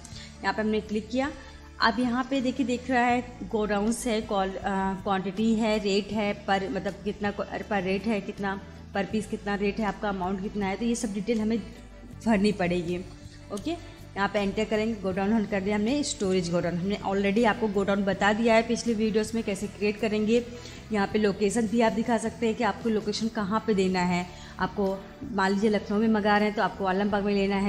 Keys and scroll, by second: 13.6 Return, 16.2 s.